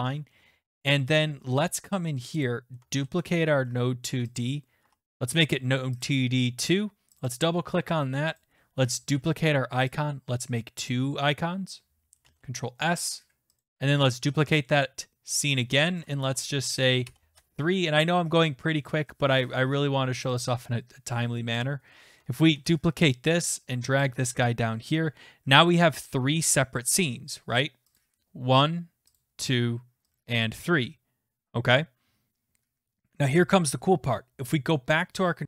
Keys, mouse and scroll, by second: 0.1 scroll, 0.7-1.2 scroll, 2.4 click, 3.0 ctrl+d, 4.4 click, 4.8 2, 6.0 click, 7.2 click, 7.4 click, 8.4 click, 9.1 ctrl+d, 10.9 click, 12.2 ctrl+s, 13.6 click, 15.5 click, 16.3 Delete, 17.0 Delete, 17.3 Return, 20.2 click, 20.4 click, 21.6 click, 22.2 Delete, 22.5 ctrl+d, 24.0 click, 24.3 ctrl+s, 28.0 click, 29.2 click, 30.2 click, 34.6 click.